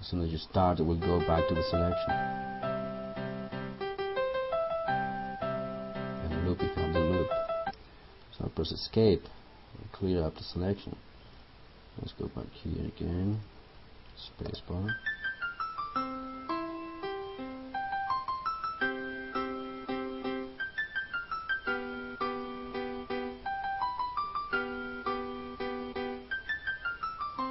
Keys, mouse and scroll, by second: 9.0 Escape, 10.9 click, 14.6 space.